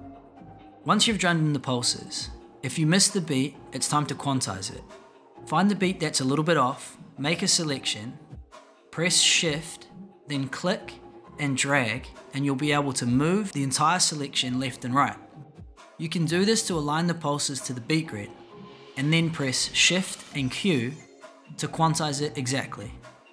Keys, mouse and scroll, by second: 10.4-15.1 shift+drag, 20.0 shift+q.